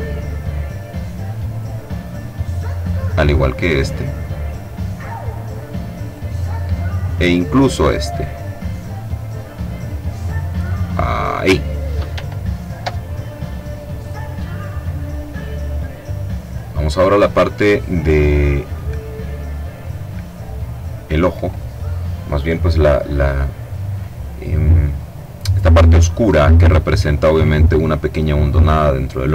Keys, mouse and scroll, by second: 2.8 click, 4.1-6.5 drag, 7.1 click, 8.9-10.2 drag, 10.8 click, 14.5 middle click, 14.8-16.9 drag, 15.8 middle click, 19.8 click, 20.6 click.